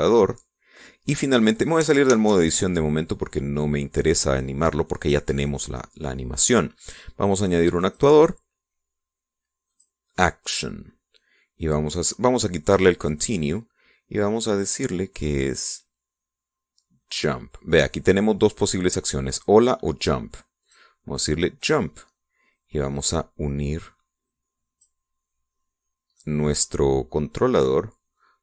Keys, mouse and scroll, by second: 0.7-2.0 middle drag, 3.1 ctrl+Tab, 6.5-7.5 drag, 8.8 click, 10.7 click, 14.2 click, 16.6 click, 21.6 click, 24.1-26.0 drag, 27.2-28.4 middle drag.